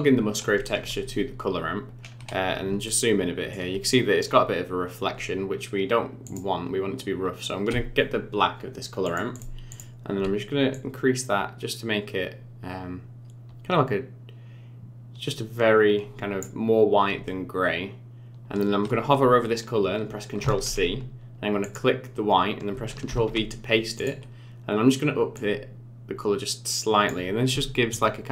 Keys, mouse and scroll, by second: 1.9-2.6 scroll up 9, 2.8 shift+middle click, 6.2 click, 9.0 click, 9.7 click, 20.4 ctrl+c, 21.6 click, 23.1 ctrl+v, 23.9 click.